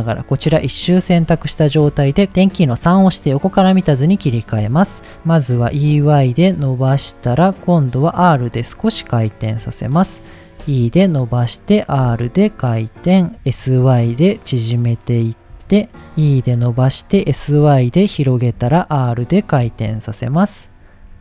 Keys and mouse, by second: 1.8 KP_3, 3.1 shift+middle click, 4.3 shift+middle click, 5.6 e, 5.9 y, 7.0 click, 8.1 r, 8.7 click, 9.4 g, 9.9 click, 10.6 e, 11.4 click, 12.1 r, 13.0 click, 13.3 s, 13.4 s, 13.6 y, 14.7 click, 15.5 g, 16.1 ctrl+shift+z, 16.1 e, 16.8 click, 17.3 y, 18.1 click, 18.5 r, 19.4 click, 19.6 g, 20.6 click, 21.0 r.